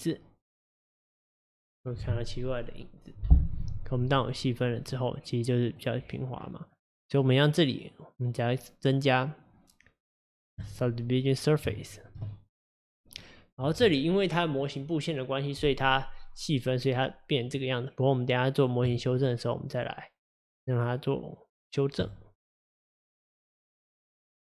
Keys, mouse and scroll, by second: 0.0-1.6 drag, 4.2-5.0 drag, 5.0-6.1 middle drag, 6.1 click, 7.2-10.3 drag, 11.8-13.2 shift+middle drag, 13.2-16.3 scroll down 2, 16.4-18.9 middle drag, 18.9 click, 19.7-22.7 drag, 22.7-24.4 middle drag.